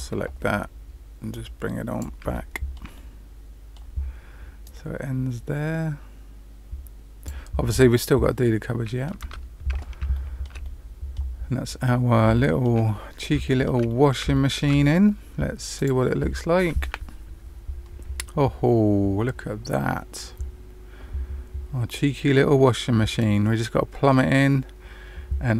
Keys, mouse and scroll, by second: 1.9 click, 2.3 shift+middle click, 2.9 middle click, 4.6 click, 7.6 middle click, 9.2 Tab, 10.0 shift+middle click, 10.6 middle click, 11.3-12.2 scroll down 2, 12.3 middle click, 12.8 middle click, 13.4 shift+middle click, 13.8 middle click, 14.3 shift+middle click, 16.1 click.